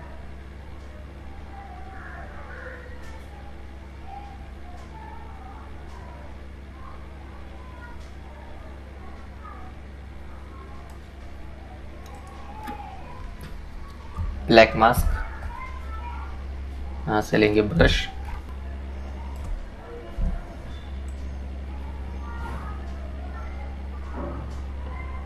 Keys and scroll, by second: 9.6 ctrl+i.